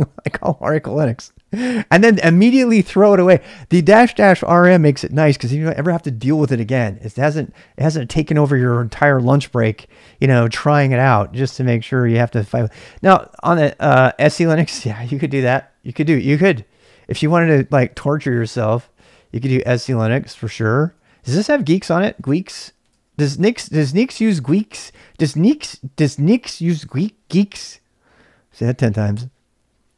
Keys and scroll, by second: 19.2-23.9 typing, 22.9 Return, 25.5-26.3 typing.